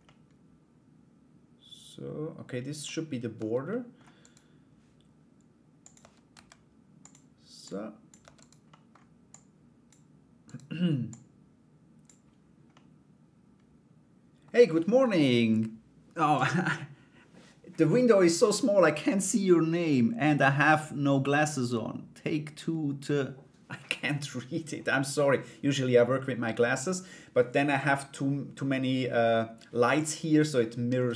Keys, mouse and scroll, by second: 2.9 Tab, 3.3 middle click, 3.8 right click, 5.4 click, 5.9 s, 7.2 click, 7.8 Tab, 7.9 right click, 8.2 middle click, 8.8 click, 10.0 right click, 10.7 click, 12.3-14.0 middle drag, 30.9 middle click.